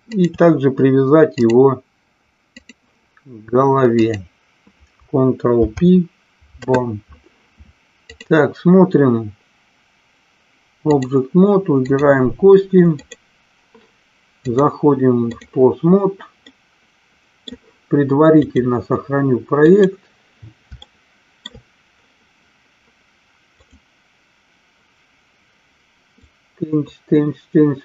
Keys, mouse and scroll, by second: 0.1 shift+click, 1.3-2.8 drag, 4.1-5.3 drag, 5.6 ctrl+p, 8.1-11.1 drag, 11.8 click, 12.9 click, 14.4-15.4 drag, 16.6-17.6 middle drag, 18.4-20.1 drag, 20.9-21.4 shift+middle drag, 23.6-25.3 drag, 26.2-27.8 drag.